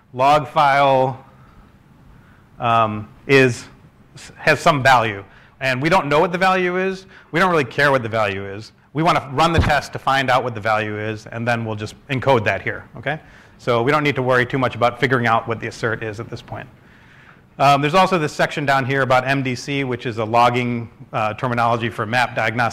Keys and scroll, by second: 3.0-4.2 typing, 4.3 ctrl+space, 6.5 shift+', 6.9 Right, 7.3 shift+0.